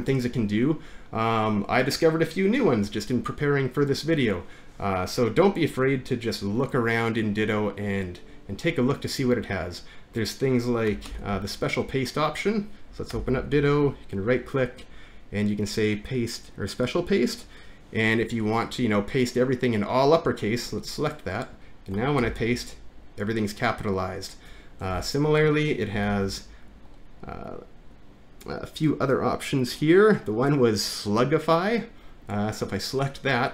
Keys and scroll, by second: 11.1 ctrl+c, 13.1 alt+`, 22.2 ctrl+v, 24.9 Return, 26.1 alt+`.